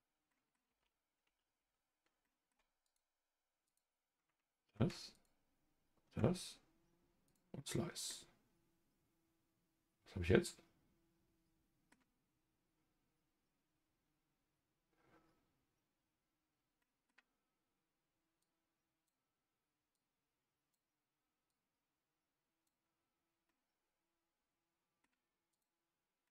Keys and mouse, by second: 0.3 middle click, 0.9 ctrl+z, 1.2 ctrl+z, 1.6 ctrl+z, 2.2 middle click, 2.8 click, 5.1 shift+click, 7.3 click, 8.1-11.9 middle drag, 16.8 middle click, 18.4-22.7 drag, 23.5-25.0 middle drag, 25.5 click, 26.2-26.3 middle drag.